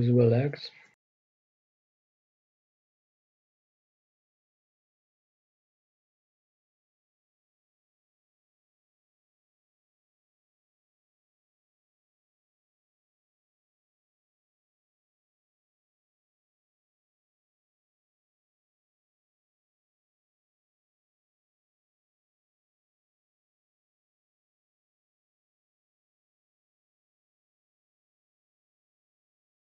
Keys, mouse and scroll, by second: 0.0-1.1 scroll up 1, 1.1-2.7 right drag, 2.7-4.6 drag, 7.2-10.2 right drag, 8.2-10.2 drag, 11.7-14.8 right drag, 12.8-14.8 drag, 17.8-21.9 right drag, 21.9 shift+d, 26.0 ctrl+m.